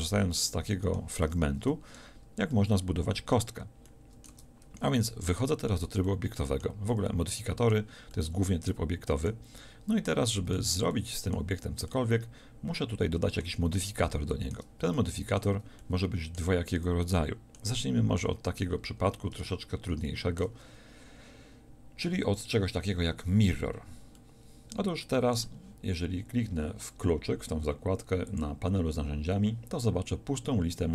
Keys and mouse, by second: 4.3 Tab, 22.1-24.2 middle drag.